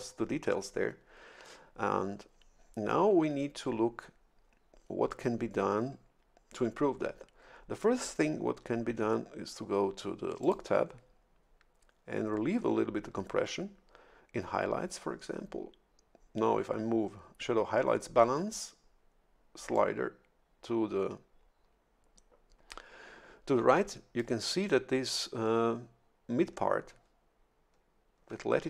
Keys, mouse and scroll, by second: 10.4 click, 19.7-24.5 drag.